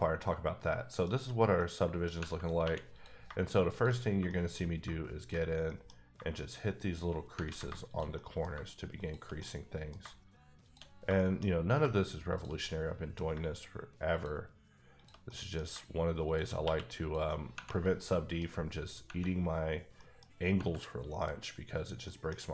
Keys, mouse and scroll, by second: 0.1 middle click, 1.1 scroll up 3, 1.6 middle click, 2.6 2, 2.9 click, 3.2 shift+click, 3.9 click, 4.0 scroll down 3, 4.2 shift+middle click, 4.5 scroll up 2, 5.2 shift+click, 5.4 scroll down 3, 5.6 middle click, 6.0 scroll up 3, 6.9 shift+click, 7.4 ctrl+z, 7.8 shift+click, 8.1 middle click, 8.9 shift+click, 9.3 middle click, 10.6 shift+click, 10.9 scroll down 3, 11.1 shift+middle click, 11.4-12.3 scroll up 2, 12.4 shift+click, 12.6 middle click, 14.1 shift+click, 14.9 shift+double click, 15.2 middle click, 16.2 shift+click, 18.0 middle click, 18.5 scroll up 1, 19.6-19.9 scroll down 1, 19.9 middle click, 20.8 middle click, 21.3-21.9 scroll up 2, 22.0 middle click.